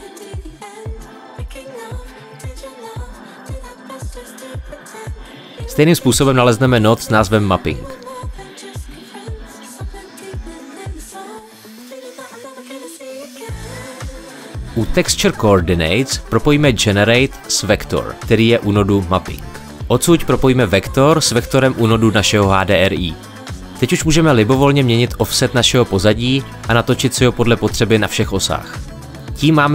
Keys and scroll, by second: 0.0-0.9 typing, 5.2 shift+a, 8.4-10.5 typing.